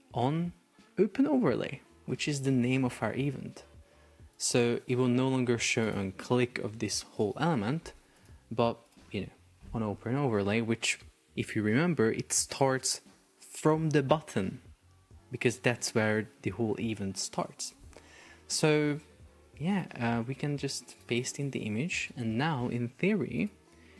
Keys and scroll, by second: 20.1 super+v, 21.2 Escape, 22.1 super+p.